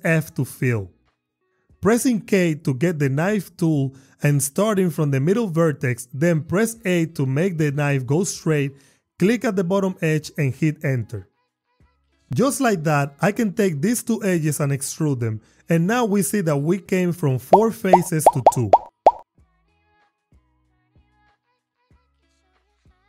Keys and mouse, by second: 0.2 f, 2.4 k, 4.5 click, 6.4 a, 9.9 click, 10.9 Return, 11.8 Tab, 14.7 e, 16.1 y, 17.3 click, 21.5 ctrl+r, 22.7 click.